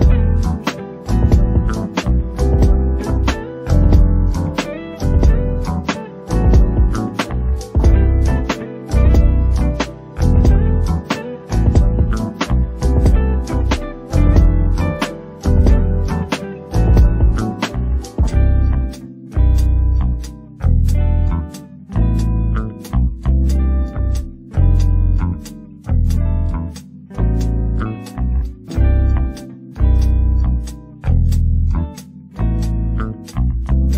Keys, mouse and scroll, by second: 0.0-3.4 typing, 0.3 click, 0.9 click, 1.5 click, 2.1 click, 2.6 click, 3.3 click, 3.9 click, 4.7 click, 4.8 g, 5.2 alt+a, 5.3 alt+click, 5.5 scroll down 5, 6.0 e, 6.4 click, 7.3 s, 10.5-11.7 middle drag, 12.0 KP_1, 12.3 s, 13.7 KP_3, 14.3 e, 14.6 click, 15.2-15.7 scroll down 2, 15.7 shift+middle click, 15.9-16.4 scroll up 1, 16.4 scroll down 1, 16.5 middle click, 17.4 scroll up 1, 17.6-19.0 shift+middle drag, 18.8 scroll up 2, 19.0 click, 19.3 shift+click, 19.8 shift+click, 20.1 shift+click, 20.2 f, 20.4 alt+a, 20.7 click, 21.0 shift+click, 21.2 f, 21.4-22.7 middle drag, 23.1 ctrl+r, 23.9 click, 24.0 middle click, 24.4 shift+click, 24.6 shift+click, 24.8 shift+click, 25.0 f, 25.2 alt+a, 25.3 click, 25.8 shift+click, 26.0 f, 26.2 alt+a, 26.4-27.6 middle drag, 27.7 middle click, 28.2 click, 28.4 shift+click, 28.6 shift+click, 28.8 shift+click, 29.1 shift+click, 29.2 shift+click, 29.3 shift+click, 29.6 shift+click, 29.7 shift+click, 30.0 middle click, 30.3 shift+click, 30.4 shift+click, 30.7 shift+click, 30.9 shift+click, 31.2 right click, 31.7 middle click, 32.1 right click, 32.6 middle click, 33.3 scroll down 4, 33.4-33.9 middle drag.